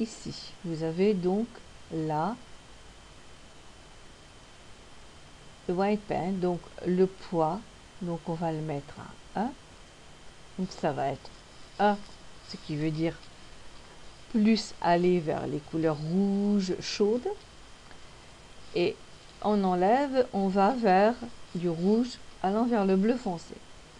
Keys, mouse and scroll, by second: 3.0 scroll up 1, 3.9-4.8 scroll down 1, 5.0-6.3 scroll up 3, 8.6 click.